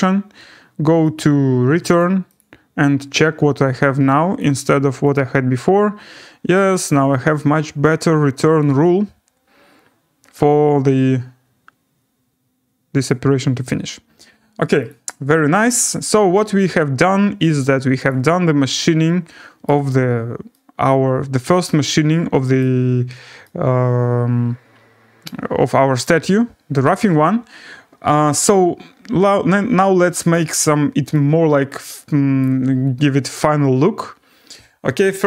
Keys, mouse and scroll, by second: 1.1 click, 2.0 click, 2.4 click, 4.4 click, 5.1 click, 5.6 scroll down 3, 6.3 scroll, 7.8 right click, 13.6 right click, 14.9 click, 15.6 scroll down 6, 15.9-16.6 scroll up 4, 17.6-18.1 scroll down 1, 18.1 click, 19.2 scroll, 19.7 right click, 20.2 scroll, 22.4 scroll down 4, 22.6 right click, 22.9 scroll down 3, 23.2-23.6 scroll, 26.0 right click, 26.4 scroll, 30.3 click, 32.4 right click.